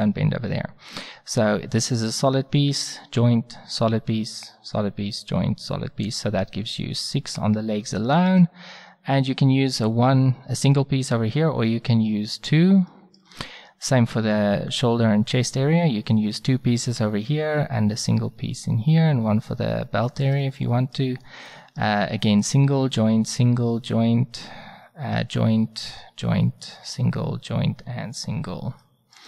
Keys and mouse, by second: 15.0-20.1 middle drag.